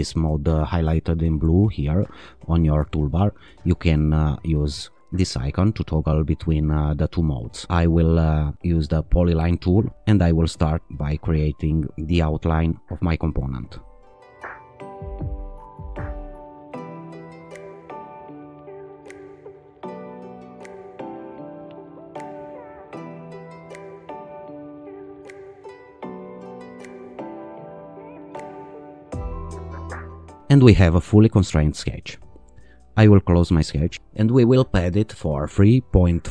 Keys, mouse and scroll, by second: 5.3 click, 11.5 click, 12.8 click, 14.4 click, 14.7 click, 15.1 click, 15.3 click, 15.6 right click, 16.0 right click, 16.3 click, 16.5 click, 16.7 h, 18.8 click, 19.0 click, 19.1 click, 19.4 click, 19.6 click, 19.7 right click, 20.1 click, 20.3 click, 20.6 e, 21.3 click, 22.8 click, 23.6 click, 23.9 click, 24.3 right click, 24.8 click, 25.0 click, 25.4 t, 25.8 click, 26.8 click, 26.9 click, 27.3 t, 27.6 click, 28.5 click, 28.7 click, 29.3 e, 30.2 ctrl+r, 33.6 click, 34.9 click, 35.5 3, 35.8 ..